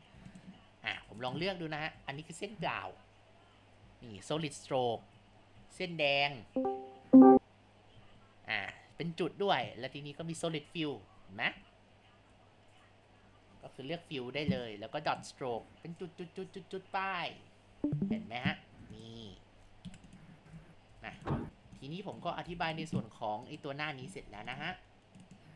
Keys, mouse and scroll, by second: 0.3 click, 1.0 Tab, 2.4-5.5 drag, 6.1-7.9 drag, 9.6 click, 10.7-12.9 drag, 13.2 click, 15.1 click, 16.0-18.0 drag, 18.7 Tab, 19.3 a, 19.9 Delete, 20.5 space, 20.9 Tab, 21.5 space, 21.8 ctrl+alt+click, 22.5 Tab, 23.5 click, 24.3 Tab, 25.2-25.5 drag.